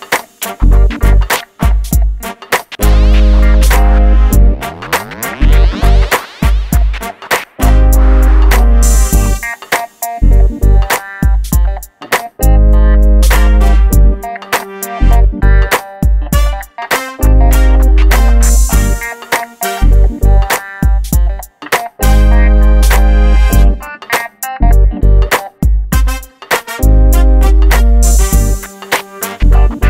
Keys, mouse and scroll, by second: 4.1 click, 4.8 shift+middle click, 5.8 scroll up 1, 6.6 shift+middle click, 6.6-7.5 scroll up 1, 7.5 l, 9.7 click, 19.3 scroll down 1, 20.2-20.9 scroll up 1, 21.3 click, 27.1 scroll down 1, 28.4-29.0 scroll up 1, 29.7-29.8 drag.